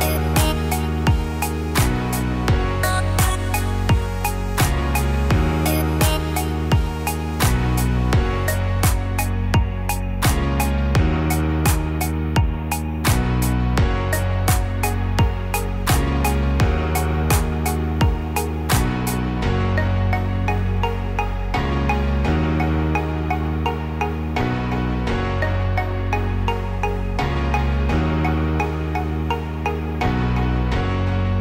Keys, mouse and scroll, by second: 3.3 right click, 4.3 click, 4.9 right click, 6.0 click, 6.5-7.6 scroll down 5, 6.8 middle click, 7.6 middle click, 8.3 middle click, 8.9-9.6 scroll up 5, 10.1-11.3 scroll down 2, 11.9-12.4 scroll up 2, 12.3 click, 13.2 click, 15.0 middle click, 16.1-16.6 scroll up 3, 16.6 middle click, 19.1 f, 19.5 click, 20.1 click, 22.3 click, 23.9 f, 24.8 click, 25.8 scroll down 4, 26.1 middle click, 26.5 scroll up 1, 26.9 click, 27.7 click, 29.1 click, 29.6 click, 30.1 middle click, 31.3 click.